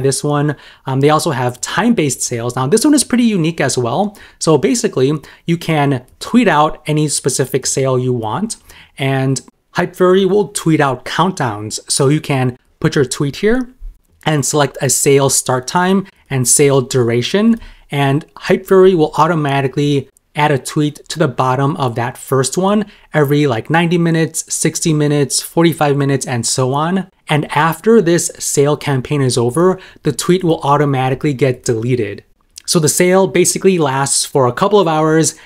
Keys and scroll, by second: 6.2 super+m, 15.0 super+m, 16.3 super+m.